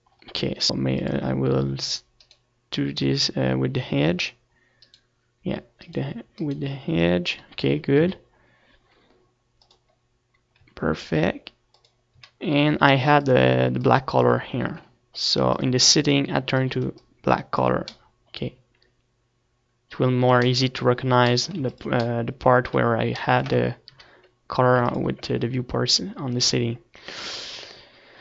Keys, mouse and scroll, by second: 1.9-5.6 drag, 3.7-5.6 right drag, 6.3-9.4 right drag, 9.3 z, 9.6 middle click, 10.9-18.9 drag, 11.9 z, 12.6 z, 15.6 z, 16.0 Tab, 19.1-20.9 middle drag, 21.7-22.9 middle drag, 22.9 ctrl+s, 25.3 ctrl+s, 25.3 KP_1.